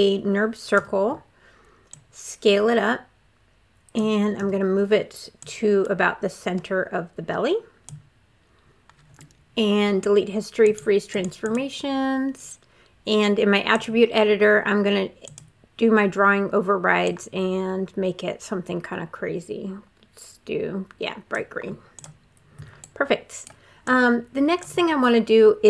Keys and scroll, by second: 0.6 r, 4.2 w.